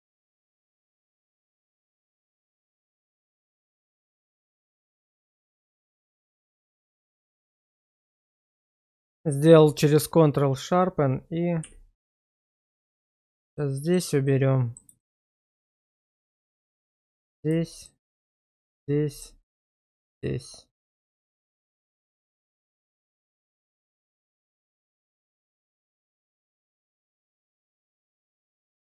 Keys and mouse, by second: 0.1 shift+middle drag, 1.4 Tab, 1.9 click, 2.5 Tab, 2.9 click, 3.6 q, 4.3 shift+middle drag, 4.8 middle click, 5.2 Tab, 5.8 shift+middle click, 7.0 middle click, 11.6 q, 13.0 shift+middle click, 13.4 shift+middle click, 13.8 shift+middle click, 14.3 middle click, 15.0 shift+middle click, 16.1 middle click, 17.6 shift+middle click, 18.9 middle click, 20.1 q, 22.2 shift+middle click, 22.8 middle click, 24.8 Tab, 25.5 shift+middle drag, 25.9-26.6 middle drag, 27.3 shift+middle drag, 27.8-28.5 middle drag.